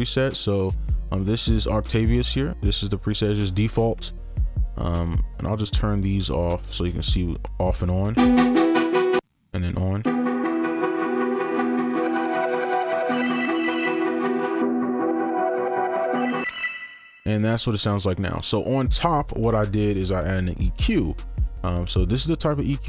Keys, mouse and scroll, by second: 8.1 space, 9.1 space, 10.1 space, 16.4 space, 21.6 double click.